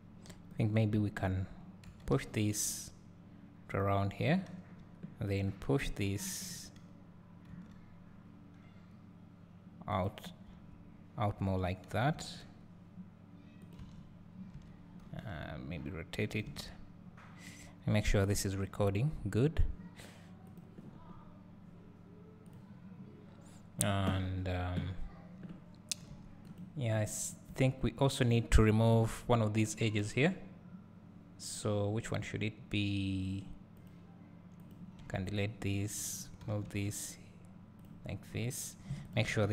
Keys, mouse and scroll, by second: 0.5 click, 1.9 g, 3.7 click, 6.4 click, 7.5 g, 12.1 g, 13.7 click, 13.9 Tab, 14.6 Tab, 15.0 r, 16.5 Tab, 20.6 click, 27.1 click, 27.5 Tab, 27.6 Tab, 28.2 click, 28.9 KP_Decimal, 29.6-31.8 scroll down 1, 33.7 click, 34.6 click, 35.2 x, 35.6 click, 36.4 g, 37.8-39.1 drag, 38.0 scroll down 1.